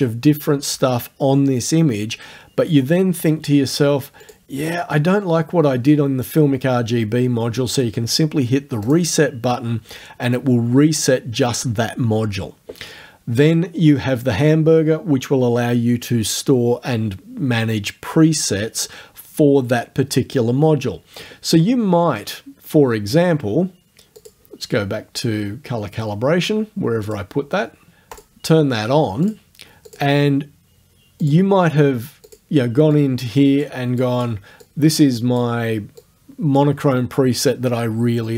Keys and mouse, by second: 4.3 click, 8.9 click, 24.2 click, 27.0 click, 28.2 click, 29.3 click, 29.9 click, 31.3 click, 32.3 click, 33.0-33.8 drag, 34.0 click, 34.6-35.5 drag, 36.0-36.8 drag.